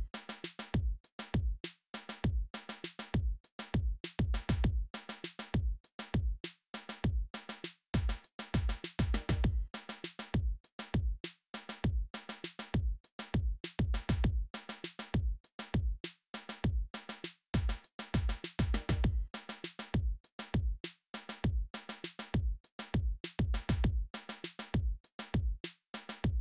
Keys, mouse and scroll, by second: 2.8 f, 14.2 n, 14.5 n, 14.8 t, 23.0 middle click, 24.9-26.4 typing, 25.0 middle click.